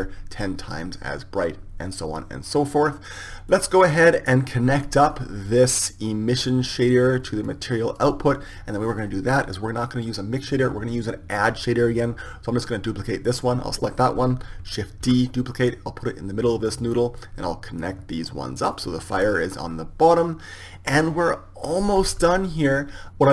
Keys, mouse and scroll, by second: 5.4-7.3 drag, 8.1-14.0 drag, 14.0-17.6 right drag, 15.7 shift+d, 17.6-23.3 drag.